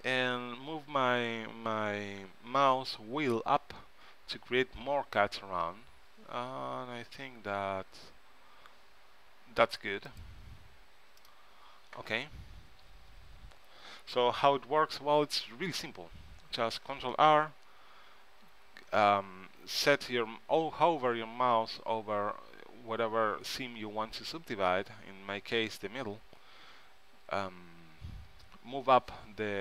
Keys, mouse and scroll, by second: 15.7 ctrl+z, 17.0 ctrl+r.